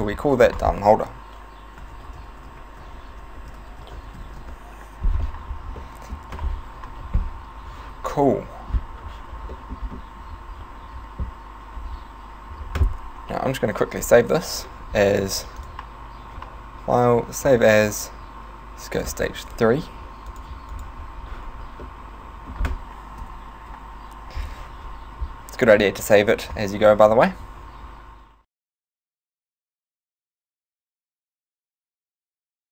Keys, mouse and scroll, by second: 0.6 click, 5.9 middle click, 9.6 middle click, 9.8-11.1 scroll down 2, 11.8-12.7 scroll down 3, 13.9 ctrl+s, 15.6 click, 20.9 click, 21.8 middle click, 23.2 KP_1, 26.7 alt+h.